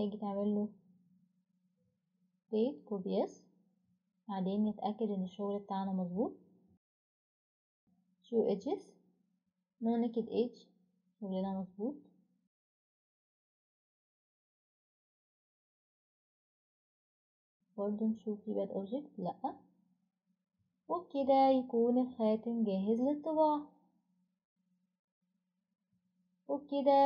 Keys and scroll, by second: 0.6-2.1 typing, 0.7 Return, 5.2-5.9 typing, 7.1-7.9 typing, 17.6 typing, 22.6 ctrl+alt+r.